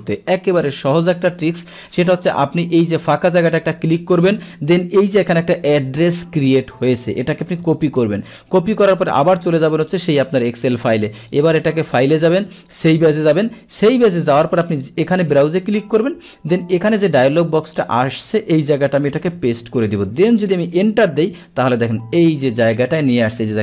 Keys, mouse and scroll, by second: 3.5 click, 7.7 ctrl+c, 8.2 click, 8.4 ctrl+c, 9.0 click, 9.8 click, 11.3 click, 12.6 click, 14.8 click, 17.5 click, 19.4 ctrl+v, 20.9 Return.